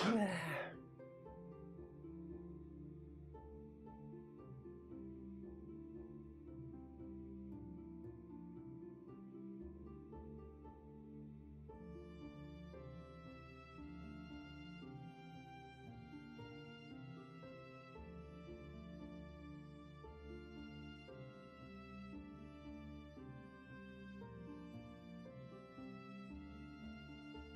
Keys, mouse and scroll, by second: 12.0 ctrl+z, 12.5-12.9 scroll down 1, 12.9-14.8 scroll up 1, 15.6-17.5 scroll up 1, 25.3 space.